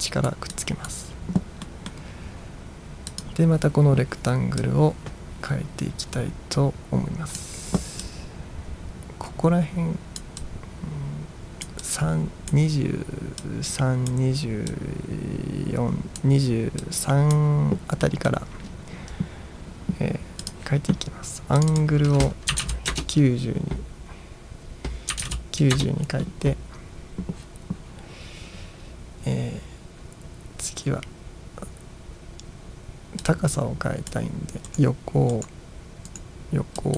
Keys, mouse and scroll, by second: 0.6 click, 1.8 middle click, 3.2 click, 4.8-7.5 drag, 8.1-10.2 drag, 10.6-11.7 drag, 11.9 click, 13.5 click, 14.8 click, 16.9 click, 18.1 middle drag, 20.5 click, 21.7 click, 21.8 click, 22.3-23.2 typing, 24.9-25.8 typing, 25.9 Return, 33.3-34.3 drag, 34.8 right click, 35.4 right click, 36.2 right click.